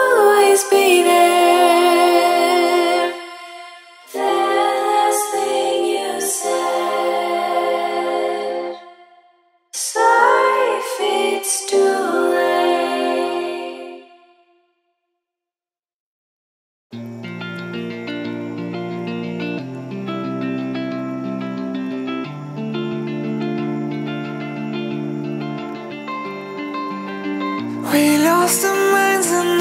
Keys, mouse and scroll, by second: 0.1 r, 1.1-2.2 drag, 2.2 e, 3.0 r, 3.8 click, 4.7 e, 5.5 r, 6.1 click, 6.4-8.3 drag, 8.4 e, 9.1 r, 10.4 e, 11.4 e, 11.9 r, 12.8 click, 12.9 s, 13.7 click, 13.9 e, 14.5 r, 15.7 shift+middle click, 16.1 e, 17.2 e, 19.1-21.0 drag, 21.0 shift+middle click, 21.5 e, 24.1 r, 25.0-26.3 drag, 26.5 e, 27.5 s, 28.6 g, 29.4-29.6 shift+middle drag.